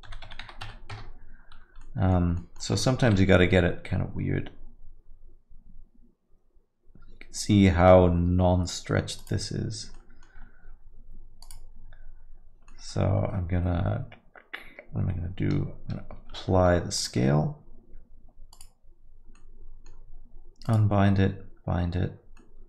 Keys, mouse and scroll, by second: 0.0 s, 1.9 alt+middle click, 2.4 middle click, 3.0 g, 10.0 alt+middle click, 11.4 click, 12.7 middle click, 16.2 ctrl+a, 18.5 click, 19.4 middle click, 20.6 click.